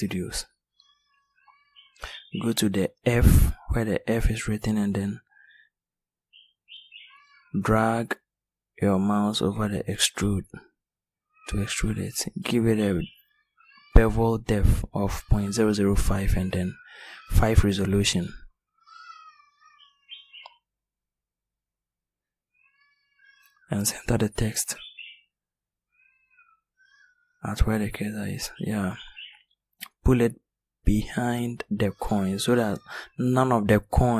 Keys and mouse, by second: 5.3-6.0 middle drag, 7.2-8.3 middle drag.